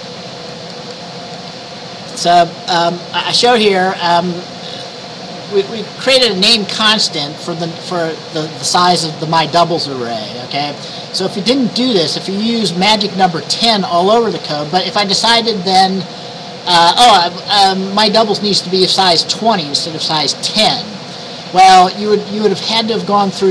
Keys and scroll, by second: 20.6 BackSpace, 20.7 BackSpace.